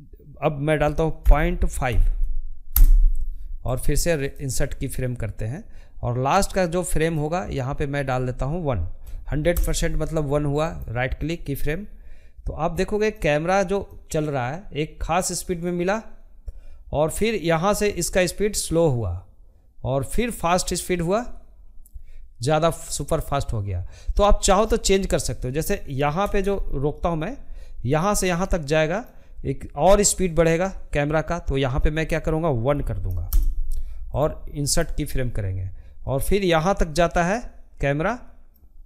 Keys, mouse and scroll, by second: 2.4-3.6 right drag, 3.6-9.3 drag, 9.3-11.2 right drag, 11.2-14.8 drag, 24.3 space, 25.2-32.8 drag, 32.8-34.1 right drag, 34.1-38.8 drag.